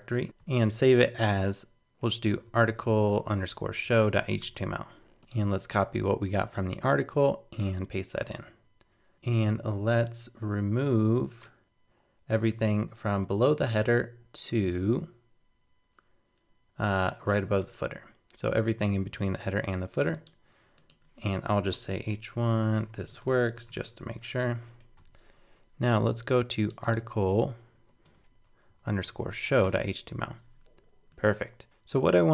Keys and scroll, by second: 0.2 super+s, 5.2 super+c, 6.4 super+v, 24.5 super+s, 24.8 super+Tab.